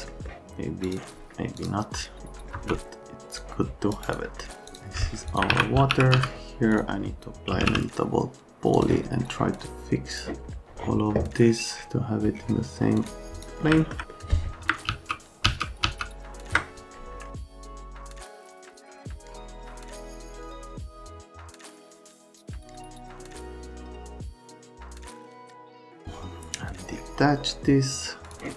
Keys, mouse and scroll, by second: 0.1 middle click, 0.3 right click, 0.6 shift+middle click, 1.0 F3, 1.1 F3, 1.2 F3, 1.3 alt+middle click, 1.6 middle click, 2.0 alt+middle click, 2.1 alt+middle click, 2.4 middle click, 2.6 alt+middle click, 2.9 middle click, 3.3 click, 3.9 F3, 4.7 F4, 5.3 F4, 5.5 alt+q, 5.7-8.1 typing, 6.7 click, 8.8 click, 10.1 click, 12.9 click, 13.2 click, 13.7 alt+middle click, 14.1 middle click, 14.9 ctrl+z, 15.5 ctrl+z, 15.8 ctrl+z, 17.3 alt+Page_Up, 17.7 ctrl+z, 18.1 click, 18.3 alt+middle click, 18.6 click, 18.7 scroll up 2, 18.9 click, 19.0 middle click, 19.0 alt+middle click, 19.2 F3, 19.3 F3, 19.5 click, 19.8 alt+middle click, 20.9 F3, 21.1 F3, 21.2 alt+middle click, 21.6 click, 21.9 right click, 23.2 click, 23.5 right click, 23.6 click, 23.8 ctrl+click, 24.0 ctrl+click, 24.2 ctrl+click, 24.3 ctrl+click, 24.5 ctrl+middle click, 24.8 ctrl+middle click, 24.9 right click, 25.1 right click, 25.2 alt+right click, 25.6 shift+click, 28.2 click.